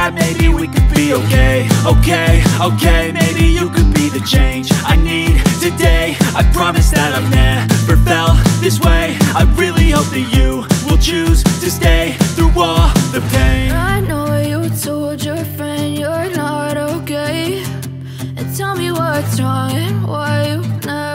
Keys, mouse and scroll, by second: 4.6 Tab, 4.6 click, 10.3 typing, 16.5 Tab, 16.9 typing, 17.2 Tab, 18.6 shift+Tab.